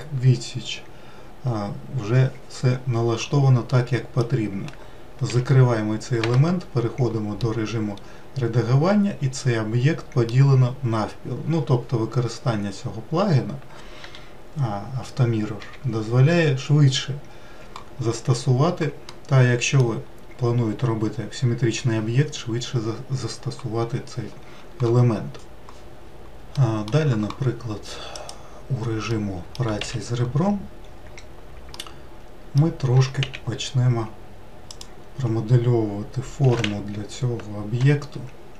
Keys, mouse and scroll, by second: 3.7-5.2 middle drag, 5.2 n, 6.2 Tab, 7.4-10.5 middle drag, 14.0 n, 15.6 n, 18.3-19.1 scroll down 1, 19.1-22.1 middle drag, 26.8-28.4 middle drag, 28.4 click, 29.3 middle click, 30.1 a, 31.3-32.0 scroll down 2, 32.0-33.2 middle drag, 33.2 s, 36.7 s.